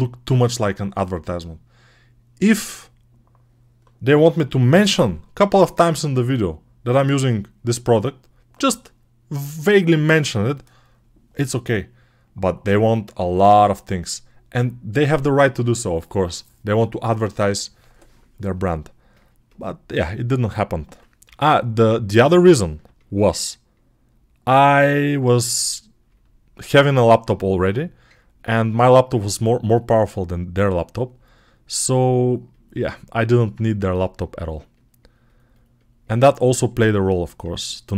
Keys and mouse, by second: 20.2 alt+q, 21.1 g, 29.1-37.9 ctrl+alt+drag.